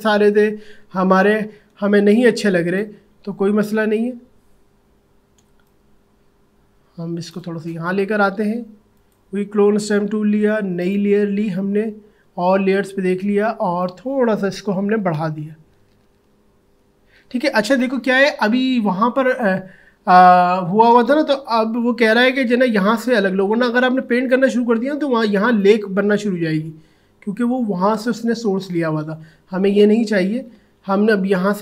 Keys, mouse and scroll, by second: 1.7 space, 2.1 click, 2.4 space, 3.9 alt+scroll up 1, 5.3 space, 5.7 click, 5.8 space, 8.9 click, 14.6-15.1 typing, 16.6 typing, 21.6 alt+], 22.1 typing, 25.6-29.6 drag, 29.6 ctrl+z.